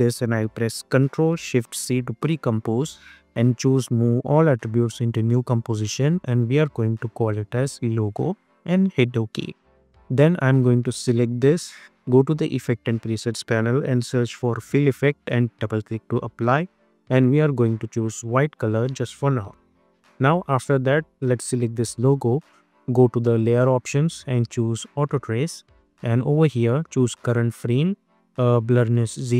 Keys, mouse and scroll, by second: 1.9 ctrl+shift+c, 4.7 click, 6.2 ctrl+a, 6.8-8.1 typing, 8.8 Return, 11.3 click, 12.9 ctrl+a, 13.5-14.8 typing, 15.6 click, 19.4 Return, 20.3 click.